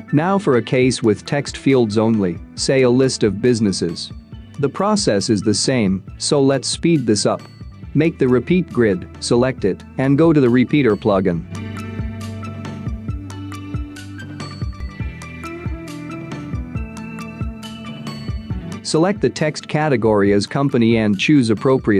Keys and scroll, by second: 2.5 space.